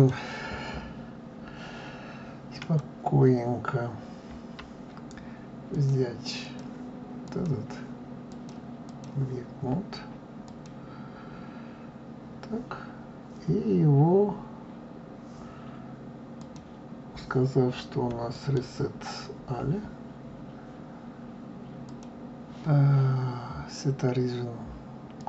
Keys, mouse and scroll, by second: 2.5 click, 5.7-7.3 drag, 8.2-10.6 drag, 16.3-19.0 drag, 21.8-24.8 drag.